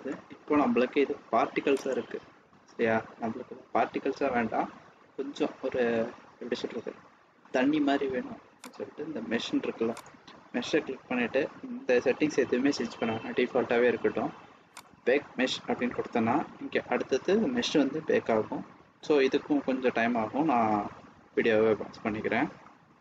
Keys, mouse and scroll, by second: 1.7 click, 4.4-5.0 scroll down 5, 4.9 scroll up 1, 5.0-6.0 scroll down 2, 6.0-6.7 scroll down 2, 6.7-7.6 scroll down 2, 7.6-7.9 scroll down 3, 8.9 click, 9.9 click, 10.7-12.9 scroll down 2, 14.6 click.